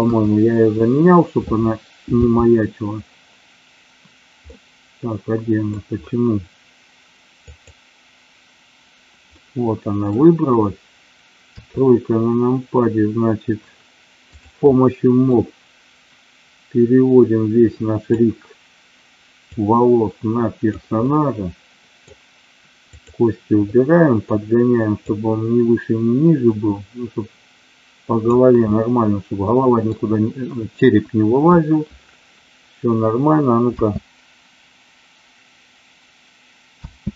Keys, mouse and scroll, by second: 2.2 g, 4.6-5.8 middle drag, 7.4 click, 9.3-10.2 middle drag, 11.4 KP_3, 14.3 click, 15.3-18.0 drag, 19.6-20.8 drag, 21.1-22.2 middle drag, 22.8 click, 23.7 middle click, 25.1-28.3 drag, 28.7-30.1 scroll up 1, 31.1 KP_1, 33.7 space, 36.8 space.